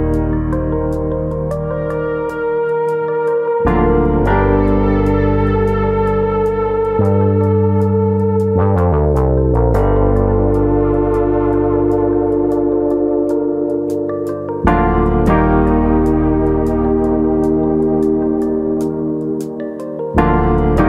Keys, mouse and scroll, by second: 0.3 middle click, 1.3 click, 2.2 ctrl+z, 2.5 Tab, 3.3 middle click, 4.0 click, 4.8 click, 5.6 g, 6.7 click, 7.0 click, 7.2 g, 8.4 click, 9.2 click, 9.5 g, 10.4 click, 10.7 click, 10.9 g, 11.8 click, 12.2 click, 12.5 g, 15.2 click, 15.8 click, 16.1 g, 17.3 click, 17.5 middle click, 18.2 scroll up 2, 18.5 middle click, 18.9-19.7 scroll up 1, 19.7 click, 19.9 middle click.